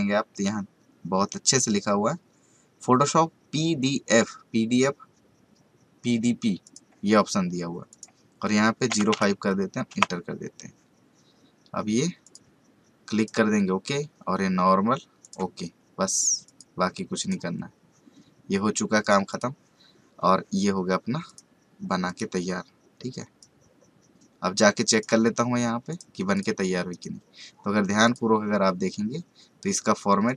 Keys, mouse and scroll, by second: 6.6 click, 12.2-25.9 drag, 26.9 right click, 28.0 click, 30.2 click.